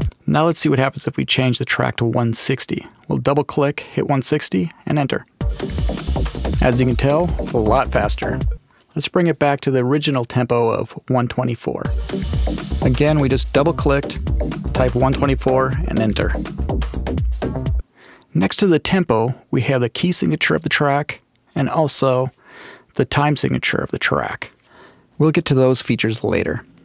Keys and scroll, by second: 2.2-3.4 typing, 3.9 Return, 5.3 space, 8.4 space, 10.1-11.7 typing, 11.2 Return, 17.6 space.